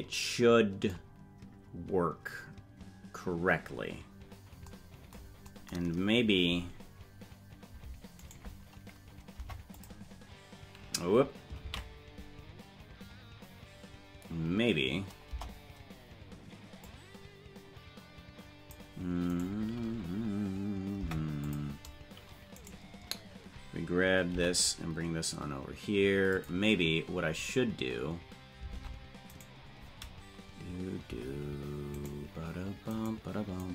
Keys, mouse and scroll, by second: 8.2 right click, 9.3 Delete, 12.5 ctrl+z, 15.3 KP_0, 16.9-18.8 drag, 19.3 right click, 20.9 Delete, 22.6 right click, 24.3 g, 27.6-28.0 scroll up 5, 28.7 ctrl+Tab, 29.4 right click.